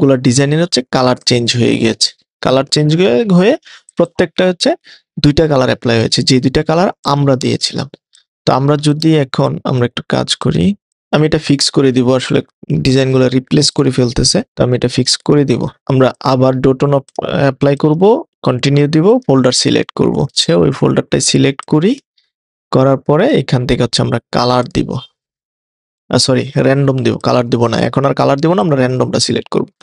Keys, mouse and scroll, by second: 4.1 click, 7.1 click, 10.4 click, 10.9 click, 11.5 click, 13.1 Right, 29.7 click.